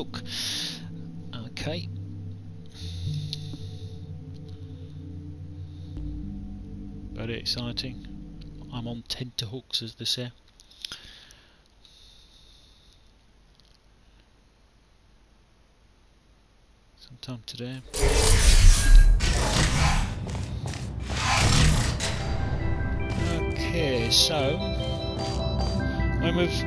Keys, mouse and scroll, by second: 20.1 w, 22.9 d, 23.4 w, 24.1 s.